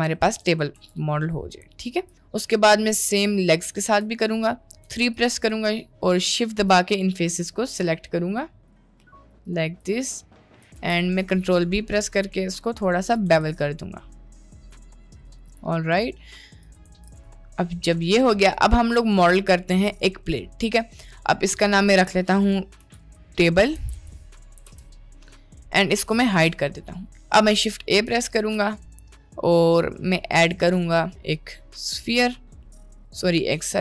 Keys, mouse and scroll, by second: 0.4 Tab, 0.8 Tab, 1.2-2.0 shift+middle drag, 2.1 middle click, 2.8-3.2 shift+middle drag, 3.7 middle click, 3.9 Tab, 4.8 3, 6.2 shift+click, 8.7 shift+click, 10.5 middle click, 10.8 ctrl+b, 13.3 Tab, 13.9 middle click, 14.3-14.6 middle drag, 15.0 middle click, 15.3 Tab, 16.2 middle click, 16.9 Tab, 17.4 middle drag, 18.2-18.8 shift+middle drag, 19.0 middle click, 19.5 shift+middle click, 21.6-24.8 drag, 26.4 click, 27.0 middle click, 28.4 shift+a.